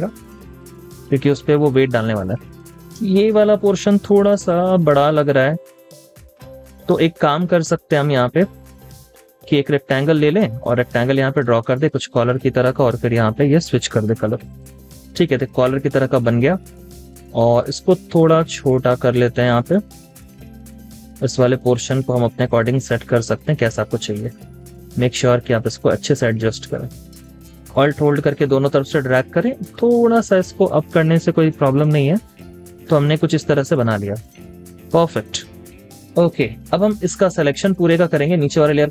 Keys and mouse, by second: 1.9 space, 3.6 v, 4.8-5.6 typing, 7.4-8.1 typing, 15.2 typing, 28.6 alt+click, 32.4 double click, 32.5-34.6 typing, 32.8 double click, 33.3 double click, 35.6 double click, 36.3 typing.